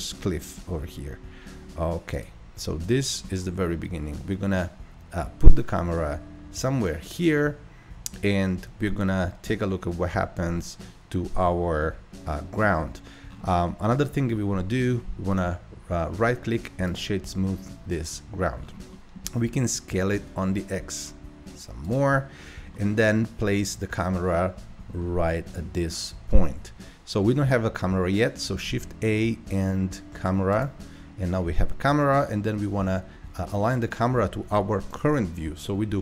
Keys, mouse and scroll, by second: 2.8 Tab, 3.3-3.9 middle drag, 3.9-5.3 scroll up 4, 5.3-8.3 middle drag, 11.8-13.3 shift+middle drag, 13.3-13.7 scroll down 1, 13.7-14.3 middle drag, 14.3-15.3 scroll up 3, 15.3-17.5 right drag, 17.5-18.6 middle drag, 18.6-18.9 scroll down 2, 18.9-20.2 middle drag, 20.2 s, 22.7-24.5 middle drag, 24.5-25.0 scroll up 3, 25.0-28.1 middle drag, 28.7 shift+a.